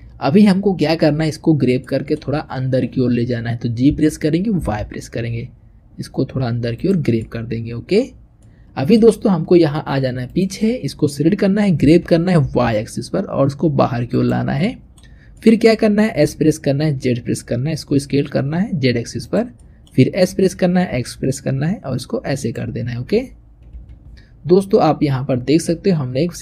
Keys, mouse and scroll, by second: 3.6 g, 7.1 middle click, 8.0 scroll down 1, 8.3-10.1 middle drag, 10.1 click, 11.6 g, 14.5 middle click, 15.0 scroll down 1, 15.2 middle click, 16.1 s, 19.4 middle click, 20.1 s, 22.6-23.6 scroll down 2, 23.6 KP_3.